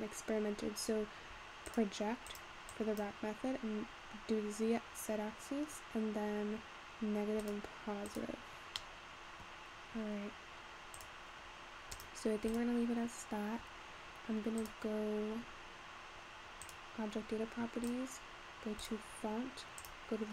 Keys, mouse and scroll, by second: 0.0-0.4 scroll up 2, 0.4-1.8 scroll down 1, 1.8-3.1 drag, 5.2 scroll down 4, 5.3-7.5 scroll up 3, 7.5 click, 8.1 click, 8.8-9.6 middle drag, 9.6-10.2 scroll down 2, 11.1 click, 11.5-11.9 scroll up 3, 11.9 click, 12.5 click, 14.7-17.4 drag, 17.4-18.2 scroll down 4, 18.2-19.6 drag, 19.6-20.0 scroll down 3, 20.0 click.